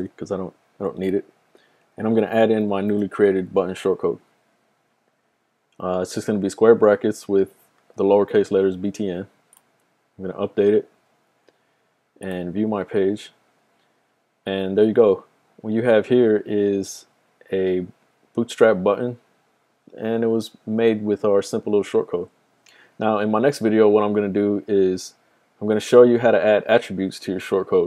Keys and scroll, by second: 1.4-3.4 typing.